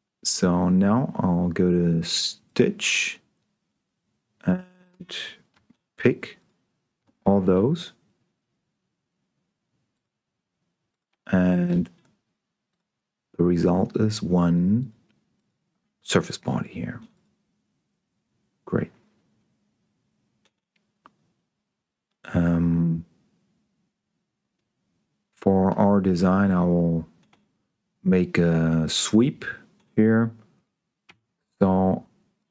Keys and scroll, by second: 31.3 s.